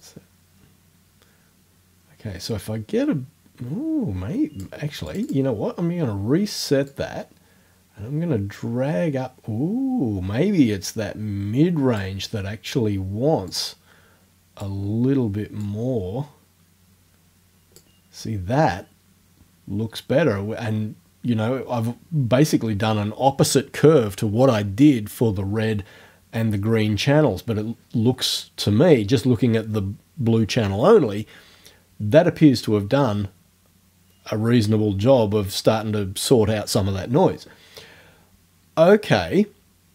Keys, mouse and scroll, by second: 0.0-4.8 drag, 5.1 click, 6.9-12.2 drag, 13.5-14.8 drag, 15.6-18.0 drag.